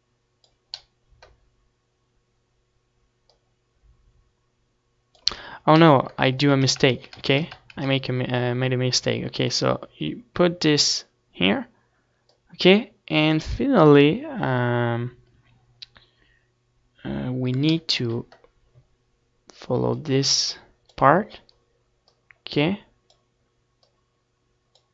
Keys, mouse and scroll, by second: 6.3 ctrl+z, 6.6 ctrl+z, 6.8 ctrl+z, 7.1 ctrl+z, 7.3 ctrl+z, 7.6 ctrl+z, 9.3-24.9 drag.